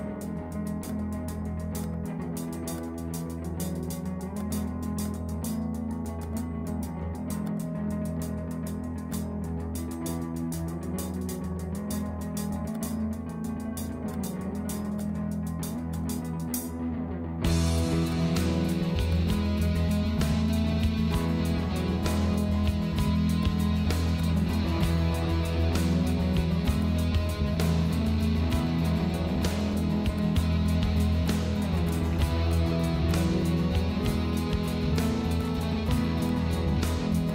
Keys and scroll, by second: 11.8 ctrl+z, 13.3 ctrl+0, 25.4 ctrl+z, 27.5 Delete.